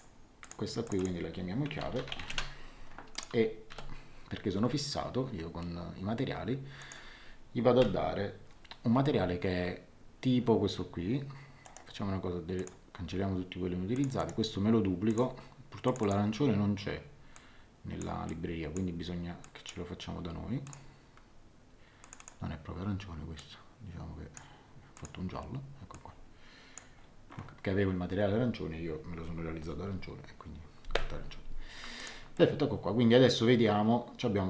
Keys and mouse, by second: 1.4-3.7 typing, 3.1 click, 6.8 click, 11.6 right click, 12.5 click, 13.9 click, 14.1 right click, 15.1 click, 17.3 click, 19.4 click, 20.6 click, 22.0 click, 23.3 click, 24.9 click, 31.9 click, 32.3 middle click.